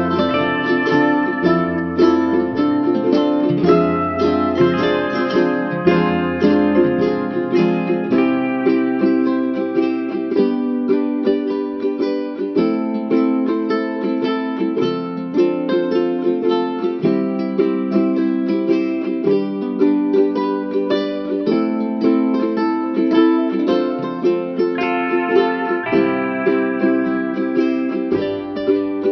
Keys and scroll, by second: 7.5 ctrl+-, 12.0 ctrl+=, 16.0 ctrl+=.